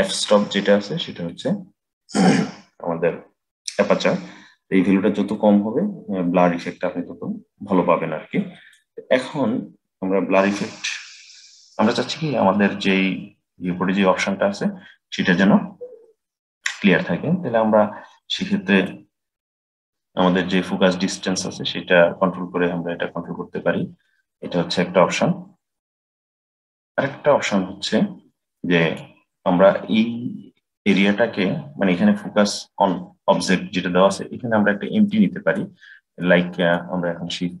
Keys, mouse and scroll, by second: 5.1-8.2 drag, 18.7-21.8 drag, 35.0 middle click, 35.7-36.1 scroll down 2, 36.1-37.6 middle drag.